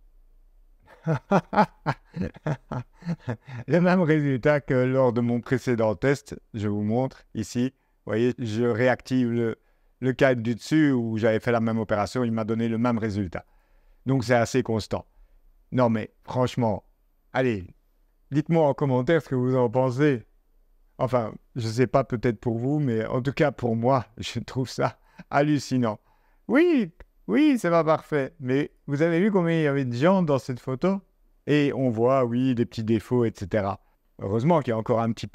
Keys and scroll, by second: 33.8 z, 34.6 0.